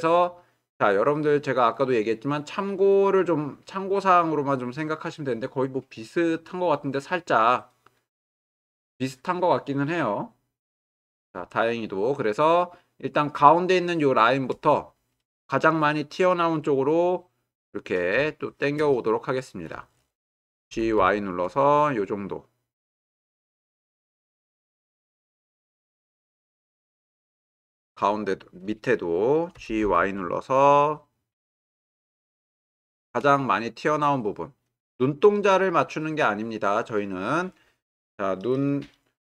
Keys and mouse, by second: 18.3-18.8 shift+middle drag, 19.0-19.6 ctrl+middle drag, 19.9 shift+middle drag, 20.7 g, 21.0 y, 24.9 g, 25.1 y, 29.5 g, 29.8 y, 32.8 shift+click.